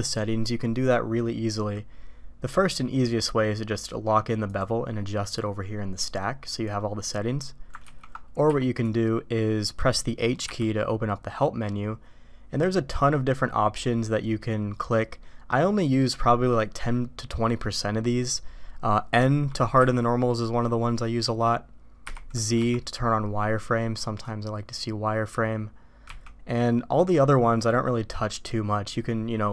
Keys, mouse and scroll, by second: 7.9 ctrl+z, 8.4 q.